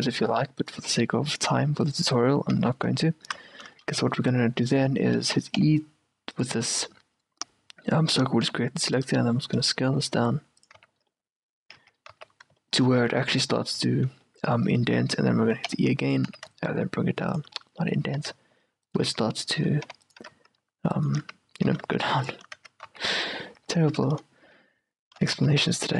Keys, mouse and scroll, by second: 0.0-1.6 typing, 0.7 middle click, 1.6-3.7 right drag, 2.7 z, 3.0 z, 3.6-8.6 middle drag, 5.7 e, 8.6 s, 10.9 z, 11.3 middle click, 12.4-15.1 middle drag, 15.8 e, 17.6-20.0 middle drag, 18.3 s, 20.0 e, 20.3 s, 21.8 s, 22.7 Tab, 23.0 z, 23.3 middle click, 23.9 Tab, 24.3-25.9 middle drag, 25.5 ctrl+r.